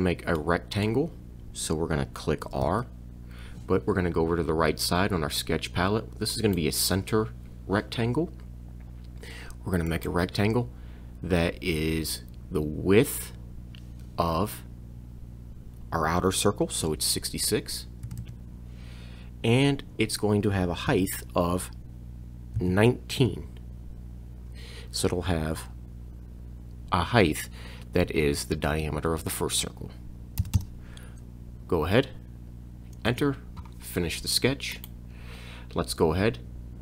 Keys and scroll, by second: 2.7 r, 18.1 6, 20.9 Tab, 22.6 1, 23.2 9, 30.4 m, 33.1 Return.